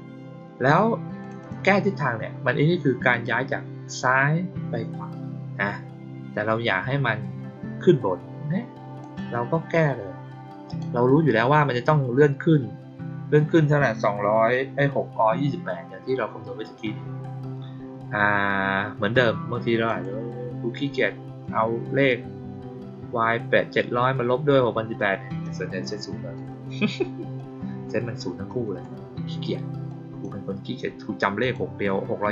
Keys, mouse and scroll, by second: 1.1 click, 1.3 click, 3.0 click, 8.9 click, 10.6 click, 19.8 click, 24.9 click, 27.3-27.8 drag, 29.8-30.1 drag, 31.3 click.